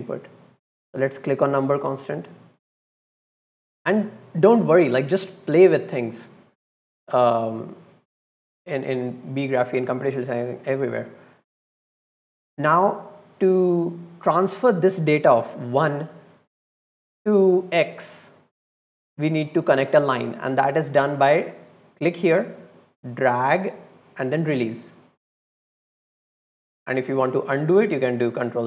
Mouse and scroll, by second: 1.8 click, 2.4 click, 4.1 click, 7.3 drag, 21.9-24.2 drag.